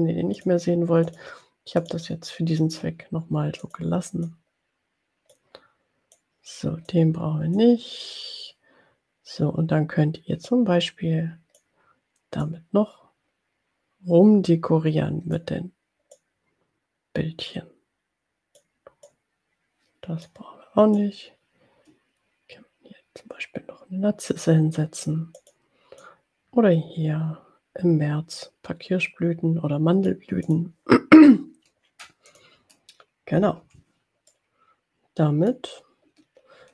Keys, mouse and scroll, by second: 0.6 click, 1.1 click, 1.9 click, 3.8 click, 4.2-5.9 drag, 6.1-7.2 drag, 7.9-12.0 drag, 12.5-15.6 drag, 16.2-18.8 drag, 19.3 click, 21.3-24.6 drag, 25.5 click, 26.0-30.5 drag, 30.7 click, 32.6 click, 33.7 Delete, 34.3-35.8 drag.